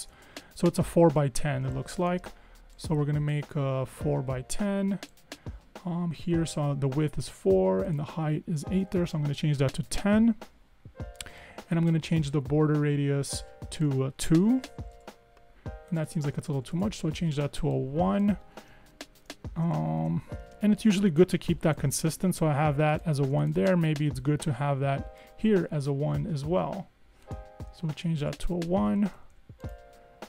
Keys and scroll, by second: 8.7-9.6 typing, 9.9 Tab, 14.9 2, 15.0 Tab, 16.4 1, 16.8 Tab, 20.0 super+-, 21.2 super+-, 27.9 1, 28.3 Tab, 29.0 Escape, 29.2 Escape, 29.4 Escape.